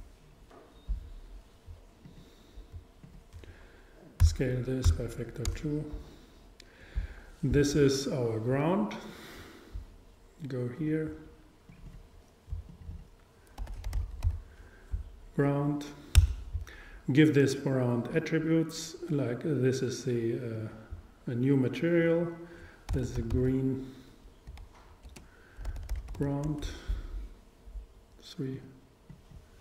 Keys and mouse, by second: 2.1-3.7 drag, 3.1 super+right click, 3.9 super+right click, 4.3 s, 9.1-13.5 drag, 19.2 click, 19.5 click, 20.6-23.9 drag, 23.4 e, 23.5 e.